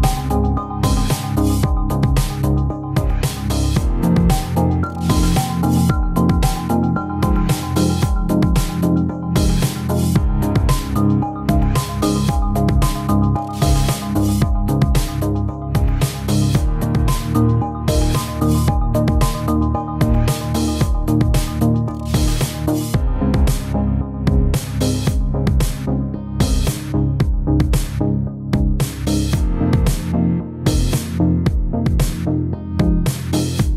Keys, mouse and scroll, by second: 0.0 shift+s, 0.1 shift+middle click, 0.3 middle click, 0.6 scroll down 3, 0.7 shift+middle click, 1.0 scroll up 3, 1.2 click, 1.4 click, 2.0 click, 2.2 click, 2.6 click, 2.8 click, 3.8 click, 4.6 scroll up 2, 4.7 middle click, 5.3 click, 5.5 click, 6.2 click, 7.2 click, 8.1 click, 8.1 middle click, 8.5 click, 8.6 shift+middle click, 8.9 click, 9.1 shift+middle click, 9.2 click, 9.3 click, 9.5 shift+middle click, 9.7 click, 10.1 shift+middle click, 10.7 click, 10.8-11.4 scroll down 3, 13.5 middle click, 13.8 middle click, 13.9 Tab, 14.1 click, 17.8 click, 18.6 middle click, 18.6 scroll down 1, 18.9 click, 19.0 click, 19.2 click, 19.4 middle click, 19.9 shift+click, 20.2 click, 20.3 Tab, 20.5 click, 20.6 middle click, 20.7 g, 21.5 middle click, 22.5 middle click, 22.5 z, 23.0 shift+middle click, 23.1 middle click, 23.3 Tab, 23.4 middle click, 23.8 click, 24.0 click, 24.3 click, 24.5 Tab, 24.6 middle click, 24.8 scroll up 2, 24.9 shift+middle click, 24.9 click, 25.0 click, 25.4 click, 25.5 middle click, 25.6 Tab, 25.7 middle click, 25.7 scroll up 2, 25.9 click, 25.9 middle click, 26.0 shift+middle click, 26.0 Tab, 26.1 click, 26.3 click, 26.4 shift+s, 26.6 click, 26.7 shift+s, 26.9 click, 27.1 scroll down 1, 27.4 middle click, 27.6 click, 27.7 Tab, 27.8 click, 28.3 Down, 28.4 Down, 28.7 click, 29.1 BackSpace, 29.3 BackSpace, 30.0 click, 30.3 click, 30.5 click, 30.8 click, 31.4 click, 31.5 click, 31.6 click, 31.7 scroll down 2, 32.0 click, 32.1 click, 32.4 middle click, 33.4 Tab.